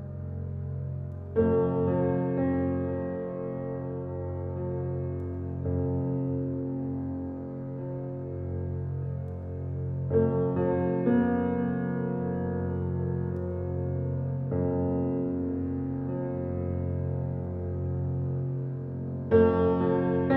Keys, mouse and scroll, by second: 1.3-1.7 drag, 1.9 click, 3.2-3.7 drag, 6.0 click, 6.9-7.3 scroll up 5, 7.3 shift+middle click, 8.2-8.6 scroll up 3, 8.6-9.7 shift+middle drag, 9.7 click, 10.1-12.0 middle drag, 12.0 click, 14.0 KP_0, 15.6-17.1 middle drag, 19.8 click.